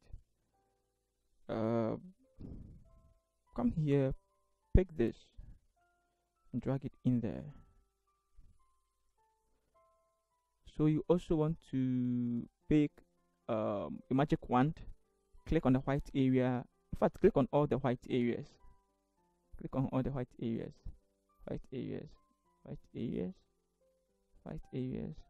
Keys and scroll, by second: 9.0 Return.